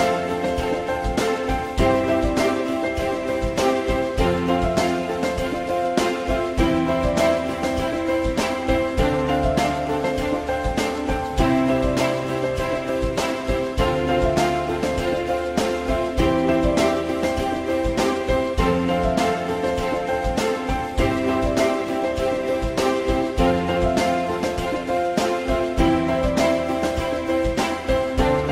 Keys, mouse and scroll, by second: 2.7 alt+middle click, 7.8 alt+middle click, 12.1 alt+middle click, 13.7 alt+middle click, 15.8 alt+middle click, 20.4 alt+middle click.